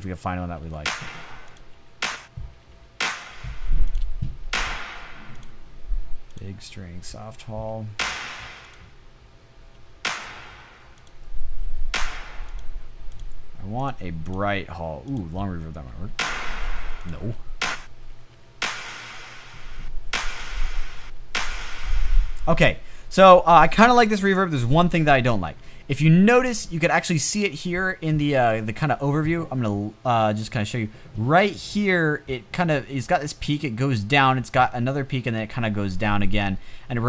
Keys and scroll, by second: 0.1-0.8 typing, 2.2 space, 3.2 space, 4.6 space, 7.2 space, 8.2 space, 9.2 space, 10.2 space, 15.4 space, 16.2 space, 19.3 space, 20.5 space, 21.4 space.